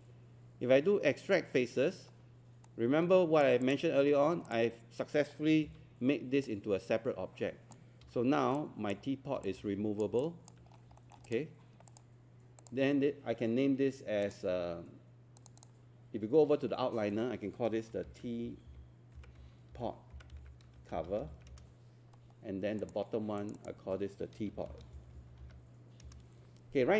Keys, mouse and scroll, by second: 3.6 click, 4.0 scroll down 1, 4.5 click, 4.8-5.3 scroll up 1, 5.6 scroll up 1, 6.5 click, 8.0 z, 8.6 alt+click, 10.2 alt+click, 10.7 scroll down 1, 11.0 alt+middle click, 11.3 click, 18.7-20.2 typing, 21.2 typing, 21.5 Return, 22.8 click, 25.0 typing, 26.0 Return.